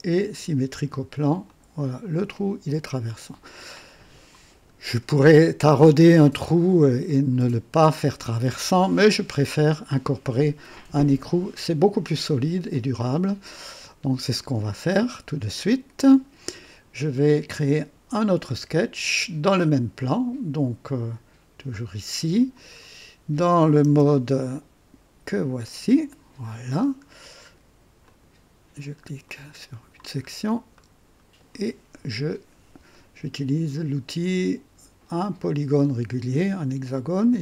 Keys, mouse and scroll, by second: 0.1 click, 1.4 click, 2.1-4.2 drag, 4.8 scroll up 2, 6.2-7.1 drag, 8.8 scroll up 2, 11.8 scroll down 2, 12.7-15.2 drag, 19.4-20.0 drag, 21.6 click, 22.7 scroll down 2, 23.8 KP_0, 25.6 click, 26.7 scroll up 1, 28.0 click, 28.7 scroll up 1, 29.2-30.0 right drag, 30.2 scroll up 1, 30.7-31.6 right drag, 35.1 click, 37.1 click.